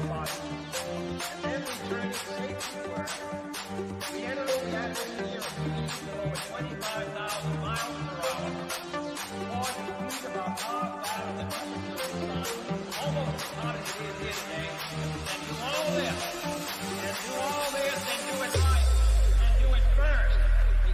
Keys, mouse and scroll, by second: 1.2-2.7 shift+middle drag, 2.7 scroll down 1, 3.2 shift+middle click, 4.0 scroll down 1, 6.1 click, 10.6 click, 14.2 g, 15.0 click, 20.0 click.